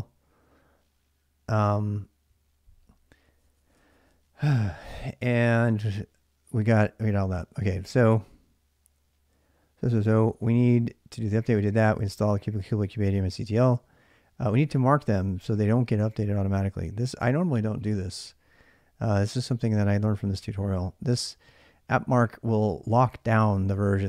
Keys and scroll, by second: 6.5-7.9 typing, 9.7-12.9 typing, 17.4 ctrl+a, 17.5 ctrl+a.